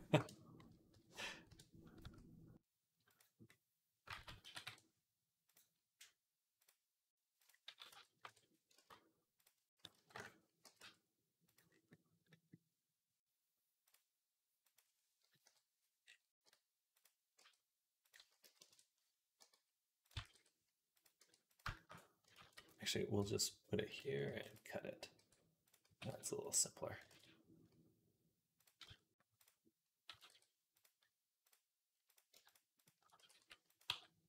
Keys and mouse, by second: 1.8 s, 3.3 click, 4.0 ctrl+z, 4.3 s, 6.4 click, 7.5 s, 8.6 ctrl+z, 9.2 click, 9.6 s, 10.5 g, 11.5-15.3 drag, 15.3 KP_3, 16.2 g, 17.2 r, 18.0 s, 19.2 g, 20.0 s, 21.0 e, 22.2 ctrl+z, 24.1 ctrl+r, 25.0 g, 25.7 s, 26.9 ctrl+z, 28.7 z, 29.9 s, 33.7 g.